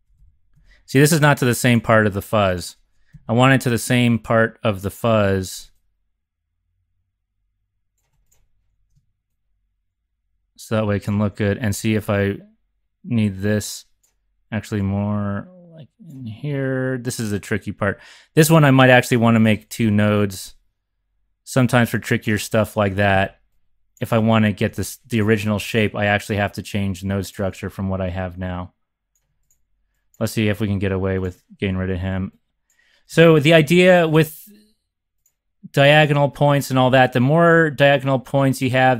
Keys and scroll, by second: 0.0 Up, 0.2 Up, 0.6 Up, 3.1 x, 11.4 z, 11.6 z, 23.2 x, 24.6 super+c, 30.4 BackSpace, 33.6 shift+super+c, 36.7 Right, 36.9 Right, 37.7 Right, 38.5 Up.